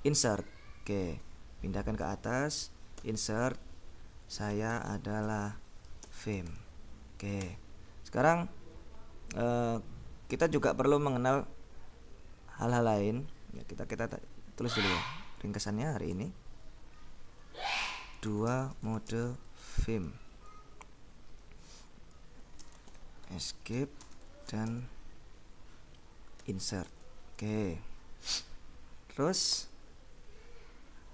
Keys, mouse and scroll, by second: 1.1 Escape, 2.1 k, 3.0 i, 4.1-7.2 typing, 7.5 Escape, 14.2-14.8 scroll up 2, 15.0 Left, 16.7 Up, 18.0-20.6 typing, 22.7-25.1 typing, 26.5 i, 26.9 shift+BackSpace, 29.6 Return.